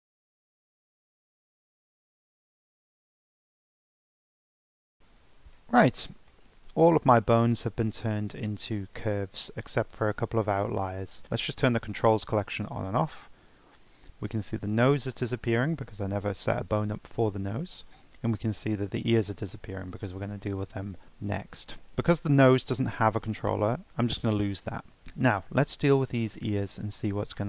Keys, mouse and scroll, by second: 0.0 Tab, 0.1 right click, 0.2 scroll up 1, 0.3 Tab, 0.5 Tab, 0.6 shift+s, 0.7 Tab, 0.9 click, 1.0 right click, 1.1 middle click, 1.2 click, 1.3 Tab, 1.5 right click, 1.6 scroll down 1, 1.7 shift+middle click, 1.9 click, 2.0 Tab, 2.0 scroll up 3, 2.1 Tab, 2.1 Tab, 2.2 Tab, 2.3 scroll down 3, 2.4 click, 2.5 right click, 2.6 scroll up 1, 2.7 middle click, 2.8 click, 2.9 Tab, 3.0 click, 3.3 shift+s, 3.4 scroll up 1, 3.5 Tab, 3.5 Tab, 3.6 click, 3.9 Tab, 3.9 shift+s, 4.1 scroll up 1, 4.1 Tab, 4.2 right click, 4.4 middle click, 4.7 click, 4.8 middle click, 6.3-7.3 shift+middle drag, 7.3 scroll down 1, 7.4 shift+middle click, 7.7 scroll up 1, 7.9 middle click, 8.2 scroll down 1, 8.3-11.2 scroll up 1, 12.6 click, 13.1 click, 13.5 click, 13.9 click, 14.2 click, 14.6 click, 15.0 click, 15.4 click, 15.8 click, 16.2 click, 16.6 click, 17.0 click, 17.4 click, 17.8 click, 18.3 click, 18.6 click, 19.0 click, 19.4 click, 19.8 click, 20.2 click, 20.6 click, 20.9 click, 21.2 click, 21.6 click, 22.5 click, 23.8 Delete, 24.9-26.0 scroll down 6, 25.3 shift+middle click, 26.2 click, 26.7-27.0 shift+middle drag, 27.0 scroll up 2, 27.3-27.4 shift+middle drag.